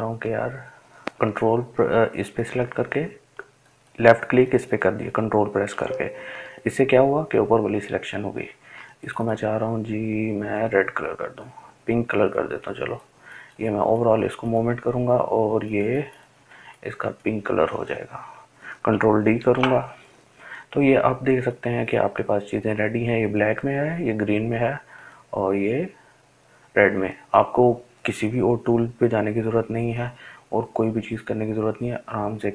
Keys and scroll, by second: 21.5 ctrl+d.